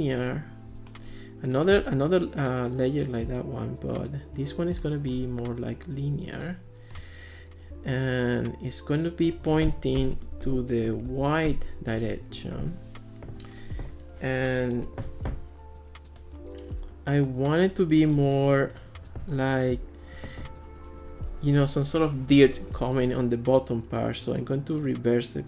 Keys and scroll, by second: 10.0 0, 10.2 Return, 11.1 1, 11.5 Return.